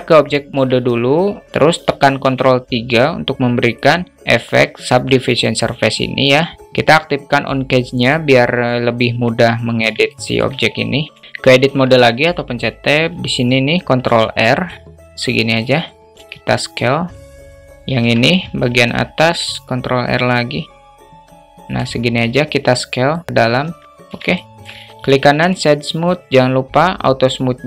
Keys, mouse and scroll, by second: 0.2 Tab, 1.5 ctrl+3, 1.5 ctrl+z, 3.2 click, 7.5 click, 9.6 shift+middle click, 10.8-11.1 alt+shift+middle drag, 11.2 Tab, 13.5 ctrl+r, 15.6 s, 17.5 Tab, 18.7 ctrl+r, 21.7 s, 23.2 Tab, 23.9-24.2 alt+shift+middle drag, 24.7 right click.